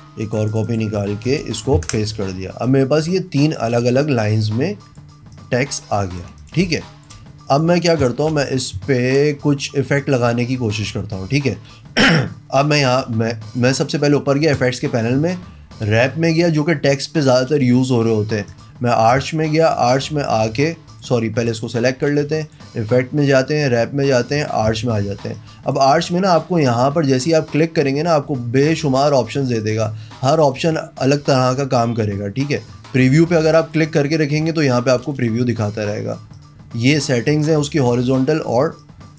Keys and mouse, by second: 0.5 click, 1.1 ctrl+a, 1.4 ctrl+v, 1.8 ctrl+KP_Enter, 2.4 a, 2.7 click, 3.4 click, 4.0 click, 4.5 click, 5.3 click, 6.7 space, 6.8 click, 7.5 click, 8.3 v, 10.0 click, 13.5 click, 14.6 click, 18.5 click, 19.6-20.3 drag, 20.9 click, 21.4 click, 22.4 click, 24.2 click, 25.4 click, 26.3 click, 27.1 click, 27.5 click, 29.6 click, 30.4 click, 30.6 click, 33.1 click, 33.6 click, 35.2 click, 36.4 click, 37.4 click, 38.2 click, 38.8 click.